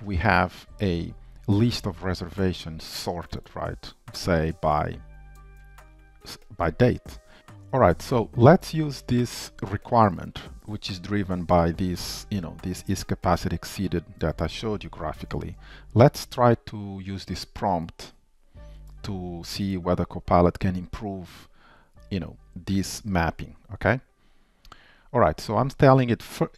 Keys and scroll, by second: 7.4 super+v.